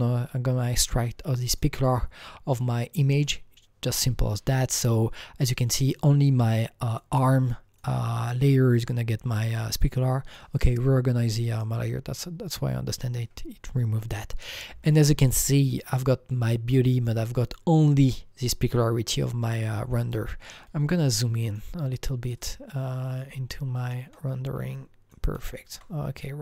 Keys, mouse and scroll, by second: 1.5 click, 6.9 click, 7.7 click, 8.8 click, 10.4 click, 11.5 click, 13.6 scroll up 3, 14.3-14.9 scroll down 1, 14.9-15.4 scroll down 2, 15.7 click, 16.9 click, 17.8-18.8 scroll down 5, 19.0 scroll, 19.0-19.4 scroll up 3, 19.7-20.3 scroll down 4, 21.4 click, 22.3 click, 23.5-26.4 alt+right drag, 24.1-26.4 alt+middle drag.